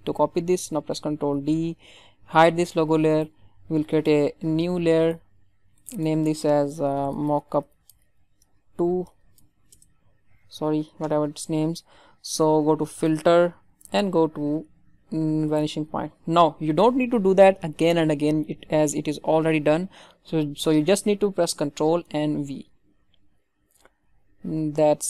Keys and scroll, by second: 1.2 ctrl+d, 9.7 Return, 22.2 ctrl+v.